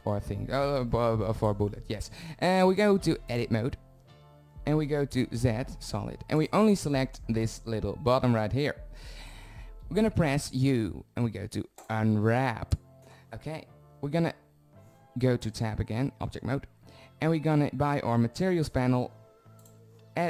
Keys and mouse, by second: 0.4 click, 2.0 z, 6.5 z, 8.7-9.7 middle drag, 11.9 u, 17.0 Tab.